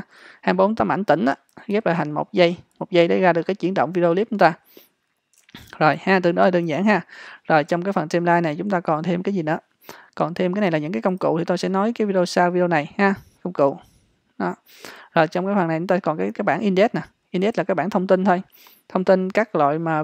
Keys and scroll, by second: 5.7 h.